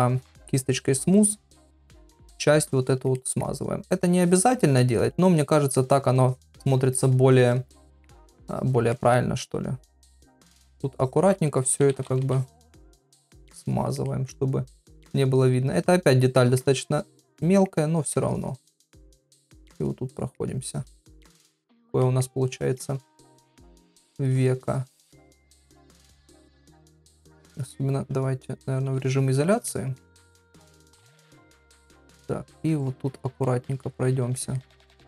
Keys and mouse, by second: 0.6 click, 1.1 click, 1.5 click, 1.8 click, 2.1 click, 2.5 click, 2.8 click, 3.1 middle click, 3.8 click, 4.2 click, 4.6 click, 4.9 click, 5.2 click, 5.5 middle click, 6.2 click, 6.6 click, 6.9 click, 7.4 click, 7.8 middle click, 8.4 click, 8.6 click, 8.9 middle click, 9.8 click, 10.3 click, 10.5 click, 10.7 click, 11.0 click, 11.8-12.3 ], 12.3 click, 12.6 click, 13.2 click, 13.5 click, 13.7 click, 14.1 middle click, 14.7 click, 15.0 click, 15.3 click, 15.7 click, 16.3 middle click, 16.9 click, 17.1 click, 17.4 middle click, 18.3 click, 18.6 click, 19.0 click, 19.3 click, 19.6 click, 20.1 middle click, 20.7 click, 21.0 click, 21.6 click, 22.0 middle click, 22.5 click, 23.1 click, 23.4 click, 23.7 middle click, 24.3 click, 24.6 click, 24.9 click, 25.7 click, 26.0 click, 26.3 click, 26.8 middle click, 27.6 click, 29.0 KP_Divide, 29.7 ctrl+middle click, 30.2 shift+middle click, 31.2 middle click, 31.8 ctrl+middle click, 32.8 click, 33.1 click, 33.4 middle click, 33.9 shift+middle click, 34.6 shift+middle click.